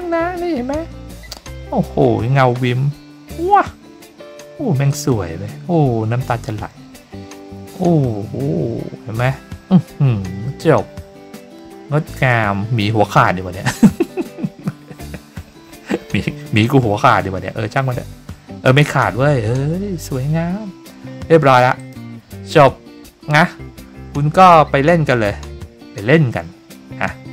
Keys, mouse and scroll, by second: 21.7 click, 24.7-25.7 scroll down 5, 25.7-26.4 scroll up 3, 26.4-26.8 scroll down 4.